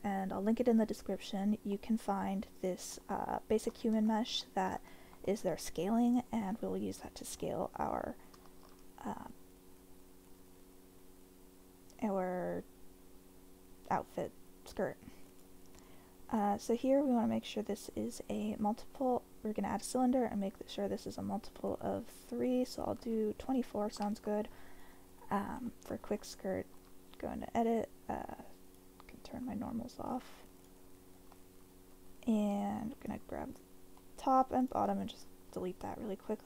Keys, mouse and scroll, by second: 1.8-2.2 middle drag, 2.9 middle click, 3.7 middle click, 4.1 shift+middle drag, 4.4 middle drag, 4.9 shift+middle click, 5.2-5.7 middle drag, 6.1 click, 6.5-7.4 middle drag, 8.4 shift+a, 17.3-24.2 drag, 25.6-26.2 middle drag, 26.7 Tab, 28.7-30.8 drag, 32.5 3, 33.0 click, 34.0 middle click, 34.6 shift+click, 35.5 Delete.